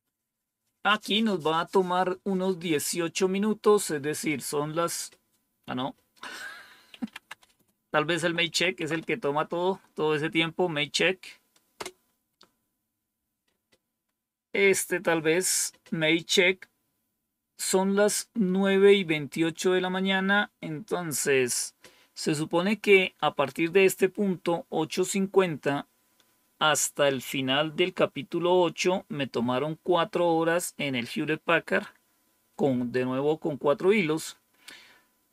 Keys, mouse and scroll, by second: 6.6-9.3 typing, 11.6 Return.